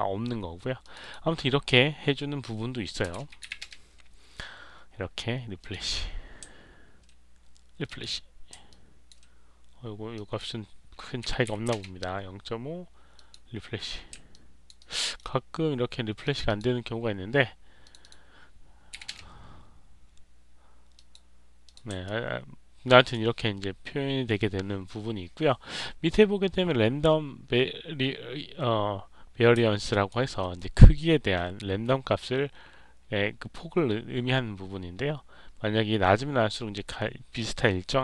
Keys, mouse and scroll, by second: 0.7 click, 0.9 click, 5.5 click, 7.8 click, 8.6 alt+click, 10.1 click, 13.1 click, 14.2 alt+click, 14.7 alt+right click, 15.0 alt+middle click, 16.1 click, 17.7 click, 17.9 click, 20.9 click, 21.6 click, 22.0-23.0 alt+drag, 29.8 alt+click.